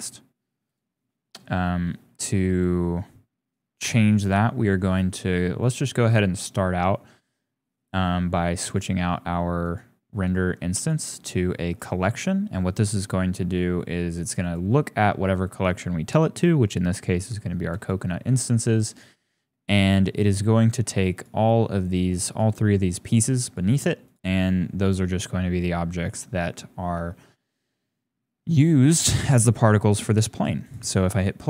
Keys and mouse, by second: 3.8 click, 5.6 click, 8.7 click, 9.7-10.2 drag, 10.7-11.8 drag, 14.5-17.9 drag, 21.2 click, 22.3 shift+click, 23.5 click, 27.3 shift+click, 30.6 click, 31.1 click.